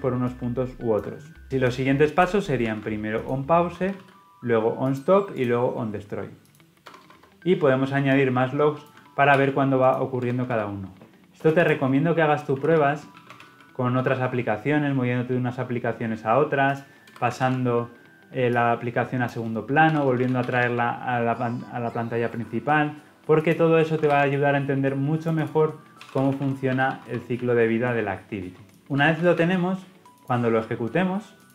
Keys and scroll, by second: 1.4 ctrl+v, 3.1 ctrl+x, 3.9 ctrl+v, 9.3 ctrl+c, 10.4 ctrl+v, 17.3 ctrl+v, 24.1 ctrl+v, 28.7 ctrl+v, 31.4 shift+F10.